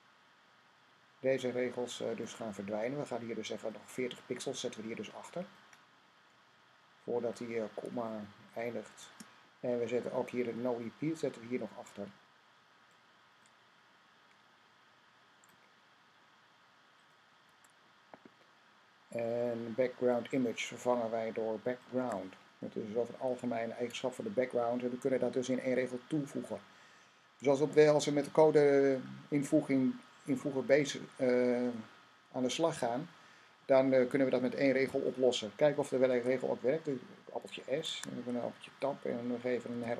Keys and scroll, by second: 35.9 s, 37.7 Tab, 39.5 r.